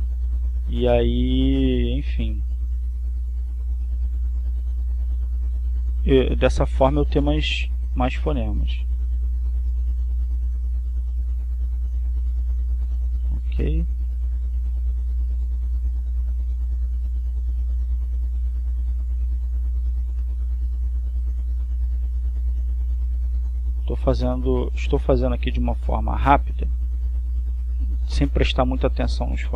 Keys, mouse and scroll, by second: 1.0 click, 2.0-4.3 drag, 4.7 click, 6.1 click, 7.0-8.7 drag, 9.1 click, 11.0-12.5 drag, 12.8 click, 13.8-15.1 drag, 15.7-16.7 drag, 17.0-18.3 drag, 19.0 click, 20.3-21.7 drag, 22.2 click, 24.1-25.5 drag, 26.1 click, 28.4-29.5 drag.